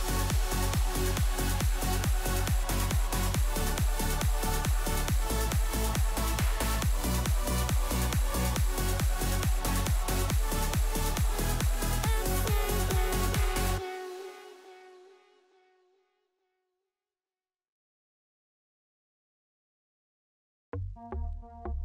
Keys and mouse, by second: 5.8 i, 6.4 i, 7.7 middle click, 8.7 ctrl+middle click, 10.2 middle click, 12.2 click, 13.1 click, 15.0 click, 16.0 g, 20.0-21.7 drag.